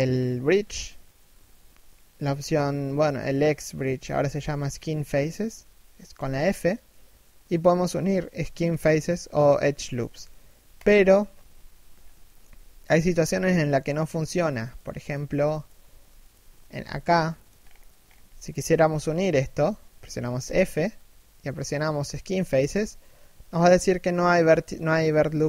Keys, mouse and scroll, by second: 5.8 f, 11.6 scroll down 2, 11.9 shift+middle click, 12.2 z, 12.5 middle click, 13.0 z, 13.5 1, 14.4 middle click, 14.9 a, 15.2 alt+right click, 16.3 alt+shift+middle click, 16.5 z, 16.9 middle click, 17.2-17.6 scroll up 1, 17.9 shift+middle click, 19.9 f.